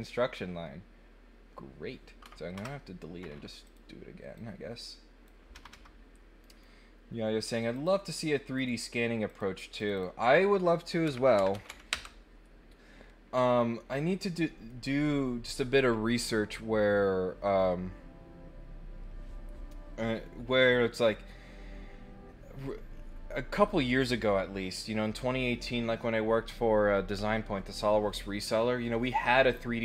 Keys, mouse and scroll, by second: 3.6 click, 4.3 click, 6.4 right click, 7.7 click, 8.5 click, 9.2 click, 9.7 click, 13.9 middle click.